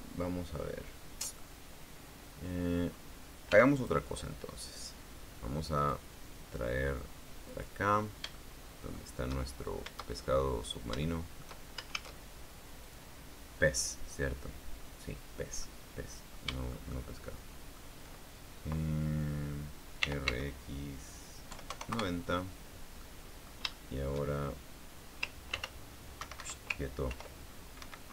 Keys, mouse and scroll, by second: 1.3 middle click, 4.2 x, 4.4 click, 6.5 click, 8.2 click, 9.0 shift+middle click, 10.0-10.4 shift+scroll up 1, 10.8 shift+scroll down 1, 11.4 scroll down 1, 11.7 shift+middle click, 12.6 shift+a, 13.5 click, 16.3-17.6 middle drag, 17.7 shift+middle click, 20.7 r, 20.9 x, 22.2 KP_9, 22.4 KP_0, 22.6 KP_Enter, 23.7 middle click, 24.4 shift+middle click, 25.2 shift+scroll up 1, 26.2 ctrl+r, 26.9 Escape, 27.8 ctrl+r.